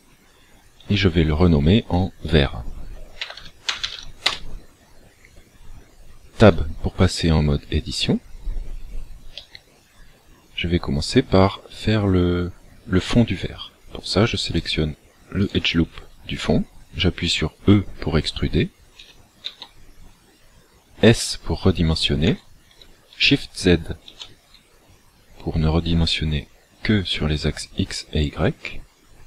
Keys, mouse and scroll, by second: 2.1 ctrl+click, 6.5 Tab, 9.5 middle click, 14.5 alt+right click, 15.5 alt+right click, 19.1 e, 22.3 s.